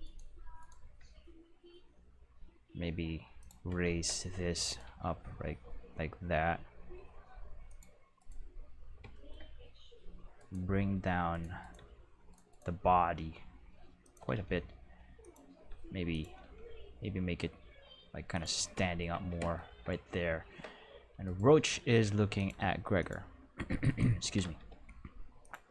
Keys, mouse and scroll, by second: 0.0 right click, 0.6 right click, 1.0 g, 3.4 click, 4.6 right click, 4.8 g, 7.6 click, 8.1 right click, 10.3 right click, 10.8 g, 11.3 right click, 11.6 right click, 11.7 g, 12.3 right click, 13.0 g, 14.0 click, 14.2 r, 14.3 r, 15.2 click, 15.6 g, 16.1 click, 16.2 r, 16.4 r, 18.3 click, 21.2 right click, 21.6 r, 21.8 r, 22.3 click, 22.5 g, 23.0 click, 23.8 right click, 24.2 r, 24.4 x, 24.5 x, 25.4 click.